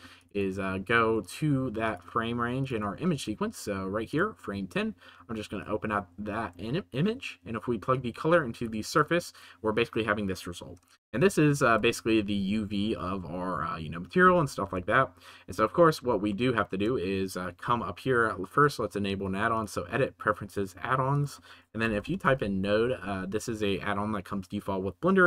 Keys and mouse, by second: 6.6-7.1 shift+middle drag, 11.0-11.5 shift+middle drag, 11.8 shift+middle click, 14.9-15.4 shift+middle drag, 16.3 shift+middle click, 18.6-19.6 middle drag.